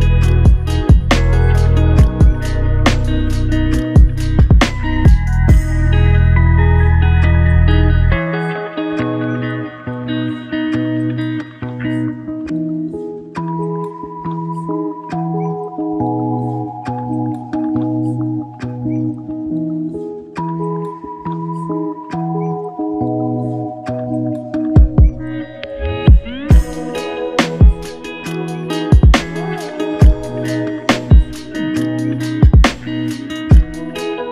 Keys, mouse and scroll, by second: 5.8 double click, 13.6 alt+shift+click, 19.9 double click, 27.7 alt+click, 29.7 double click, 32.3 alt+click.